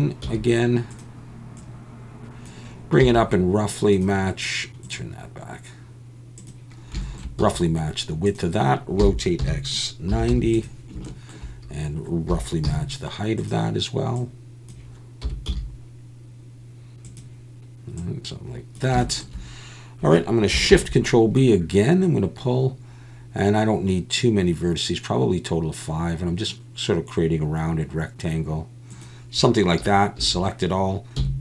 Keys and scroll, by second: 0.2 s, 3.0 s, 7.4 s, 9.0 r, 9.4 x, 10.1 9, 10.3 0, 12.3 s, 12.6 z, 15.2 s, 15.5 z, 30.2 a, 31.2 x.